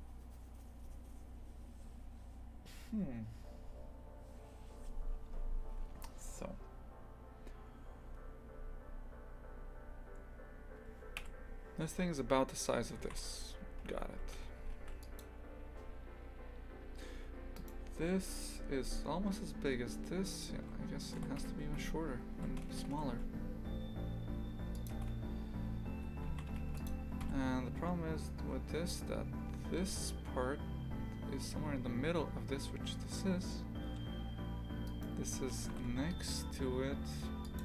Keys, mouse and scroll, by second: 11.1 KP_3, 12.1 scroll up 2, 13.0 shift+f, 17.5-20.5 right drag, 20.5 s, 21.6 Tab, 22.3 s, 25.9 Tab, 26.2 shift+f, 27.2 KP_3, 28.7 scroll down 1, 34.8 right click, 35.5 g.